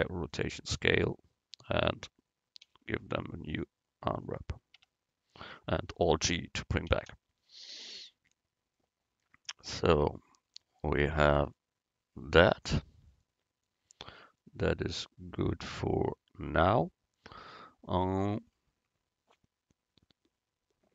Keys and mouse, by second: 1.8 Tab, 2.7 u, 4.9 Tab, 6.9 alt+g, 9.6-11.3 drag, 11.3-12.4 middle drag.